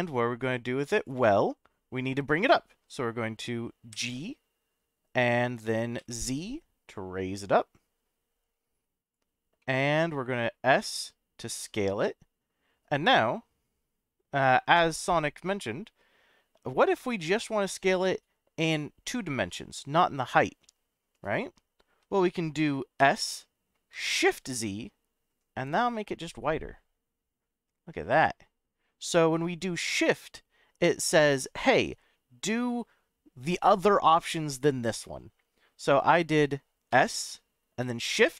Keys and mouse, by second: 2.5 middle click, 3.9 g, 6.0 z, 9.0 click, 9.6 middle click, 10.8 s, 21.2 right click, 23.0 s, 24.4 shift+z, 36.0 right click, 36.9 s.